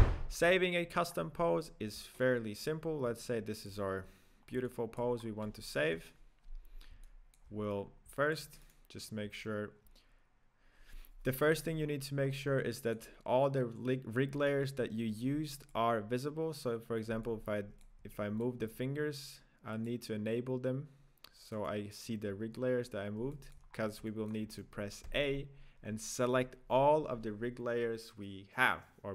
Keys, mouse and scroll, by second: 0.1-1.2 scroll up 3, 1.2-1.8 scroll up 2, 2.3-2.9 shift+middle drag, 2.9-3.2 scroll down 1, 3.2-4.5 middle drag, 4.5 scroll down 2, 4.7-5.2 shift+middle drag, 5.2 scroll up 2, 6.0 KP_0, 7.0 shift+middle click, 7.9 scroll down 1, 8.2-8.9 middle drag, 8.9 right click, 9.2-12.0 scroll down 1, 12.0-12.4 scroll up 4, 12.6-15.9 middle drag, 15.9 click, 17.3-19.4 shift+middle drag, 19.4 click, 21.9 right click, 23.4-23.8 shift+middle drag, 23.8-24.1 scroll down 1, 24.1-24.8 middle drag, 24.8 right click, 25.4 a.